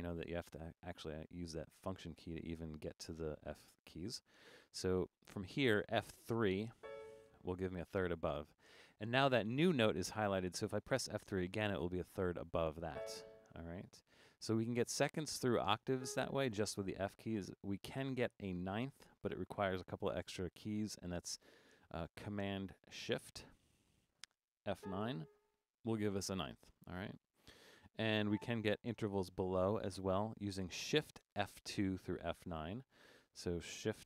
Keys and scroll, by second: 6.8 F3, 12.9 F3, 24.8 shift+super+F9.